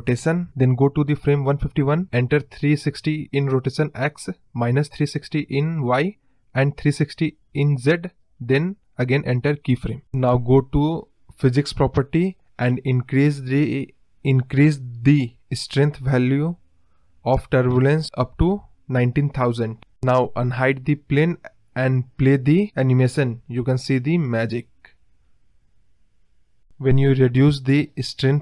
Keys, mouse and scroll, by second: 0.3 Right, 1.1-2.6 drag, 6.0 click, 6.4 click, 6.7 click, 7.5 click, 7.8 b, 8.9 space, 13.6 space, 14.2-15.7 drag, 16.3-17.5 drag, 17.5 KP_0, 20.3 click, 21.0 click, 22.3 scroll up 1, 22.4-23.1 scroll down 1, 26.9-28.4 drag.